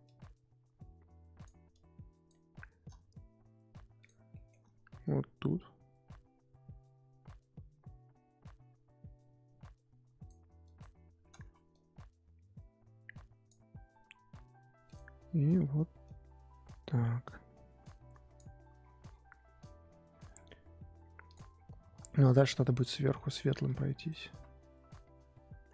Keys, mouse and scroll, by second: 4.3-5.6 shift+middle drag, 5.6-8.6 drag, 10.6 click, 11.4 ctrl+z, 11.7-14.9 drag, 16.0-18.8 drag, 18.8-20.0 scroll down 8, 20.0-21.3 scroll up 9, 21.3 click, 21.5-22.6 scroll up 2, 22.6 click, 23.4 ctrl+z, 23.6 click, 24.3 ctrl+z.